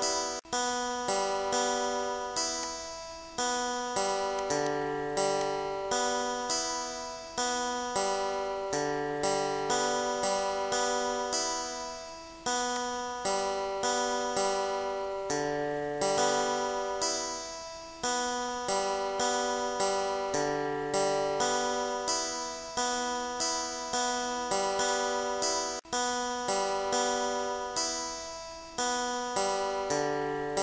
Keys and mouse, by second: 0.4 click, 1.9 click, 2.9 click, 5.0 click, 6.0 click, 12.7 click, 14.6 click, 16.3 click, 18.3 click, 18.8 click, 20.0 shift+click, 21.7 click, 22.8 click, 23.5 click, 24.9 click, 26.3 ctrl+z, 28.3 shift+click, 29.2 click, 30.5 click.